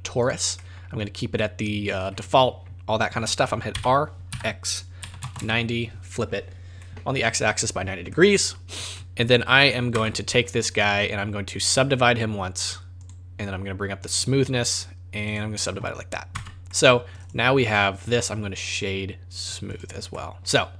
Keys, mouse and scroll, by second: 0.6 middle click, 0.9-1.4 scroll up 5, 1.4 middle click, 3.7 r, 6.8 middle click, 7.7-8.1 scroll down 5, 8.1 middle click, 8.9 middle click, 9.9 Tab, 10.3-10.7 scroll up 2, 10.7 right click, 13.1 right click, 13.1 click, 14.0 click, 15.4 click, 16.3 Tab, 16.7 middle click, 17.1 right click, 17.2 right click, 18.0 right click, 20.1 middle click, 20.5 scroll up 3.